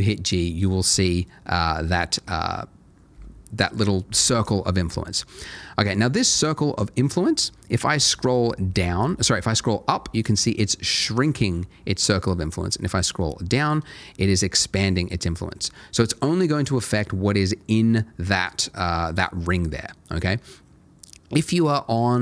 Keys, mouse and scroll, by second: 7.8-12.6 scroll up 1, 12.6-13.6 scroll down 1, 14.8 scroll down 1, 15.5 scroll up 1, 15.6 scroll down 1.